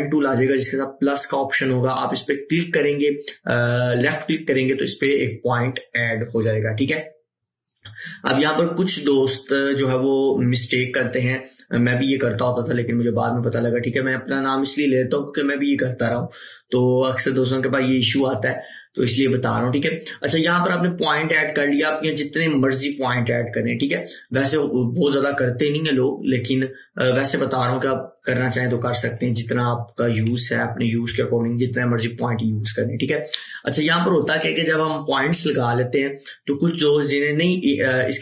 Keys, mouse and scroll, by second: 4.1 click, 4.2 click, 22.9 click, 33.6 click, 33.6 click.